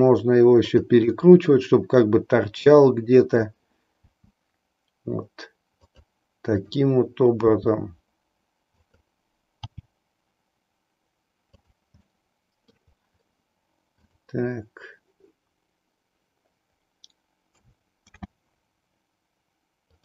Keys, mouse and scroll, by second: 1.1-3.6 middle drag, 4.1 r, 6.6 click, 7.5 r, 9.0 click, 9.7 g, 12.1 middle click, 14.0 click, 18.1 shift+d.